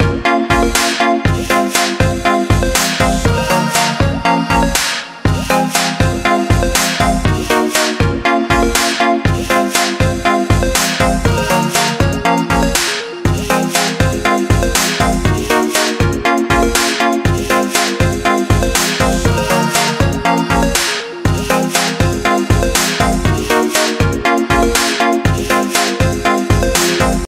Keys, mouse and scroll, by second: 6.9 click, 9.2 scroll down 1, 10.9 scroll up 1, 11.7-12.2 scroll down 1, 12.2 click, 18.4 click, 23.0-24.5 scroll down 1, 27.2 click.